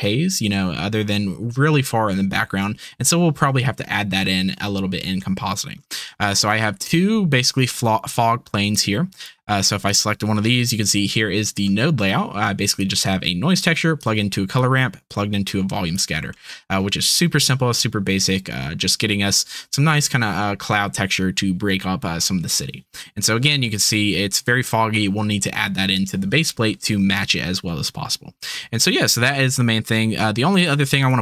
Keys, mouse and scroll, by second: 5.2-5.5 shift+middle drag, 5.5 shift+click, 9.8 click, 11.7 click, 12.9 click, 13.6 typing, 14.1 click, 15.1-16.1 drag, 16.3 click, 30.6 click.